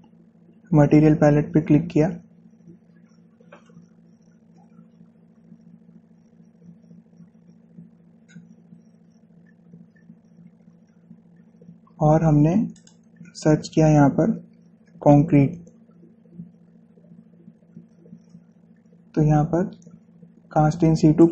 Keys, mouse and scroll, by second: 1.1 typing, 13.6 click, 14.9-16.2 typing.